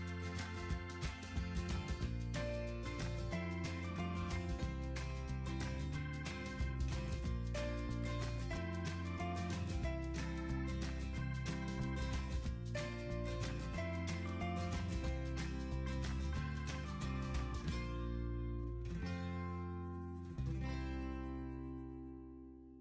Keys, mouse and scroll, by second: 5.2 typing, 5.7 Return.